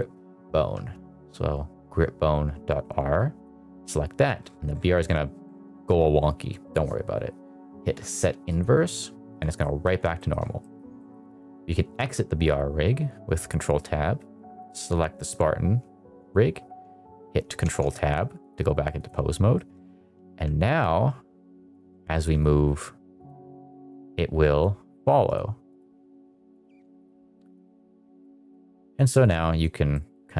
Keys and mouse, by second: 8.4 click, 9.5 middle drag, 10.1 middle drag, 10.5 middle click, 10.9 middle click, 11.9 ctrl+Tab, 14.5 click, 17.6 ctrl+Tab, 18.4 click, 19.5 middle drag, 20.2 g, 22.0 shift+middle click, 23.1 click, 23.9 click, 25.2 click, 25.7 click, 26.9 click, 27.5 click, 28.4 click, 28.6 click, 29.1 click, 29.8 middle click.